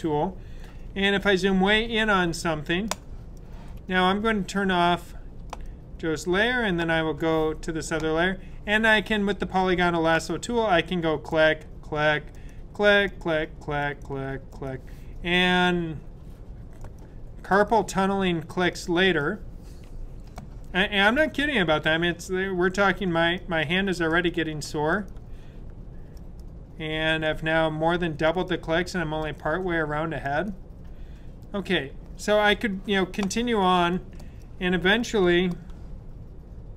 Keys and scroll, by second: 0.8 super+=, 1.0 super+=, 1.3 super+=, 1.6 super+=, 1.8 typing, 4.3 super+=.